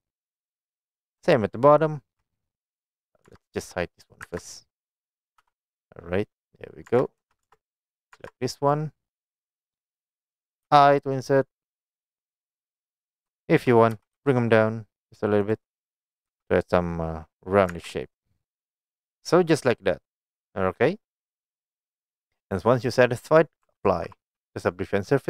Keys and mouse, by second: 1.3-2.2 shift+middle drag, 3.3 Tab, 4.0 click, 4.3 Tab, 5.4 h, 6.2 middle click, 6.9 Tab, 7.5 Tab, 7.7 click, 8.2 Tab, 8.7 click, 10.8 i, 12.4 click, 12.7 middle click, 13.4 shift+middle click, 14.0 g, 14.2 z, 15.5 click, 16.4 i, 17.6 click, 18.2 Tab, 18.2-19.8 middle drag, 20.3 middle click, 22.1 click, 23.9 ctrl+a.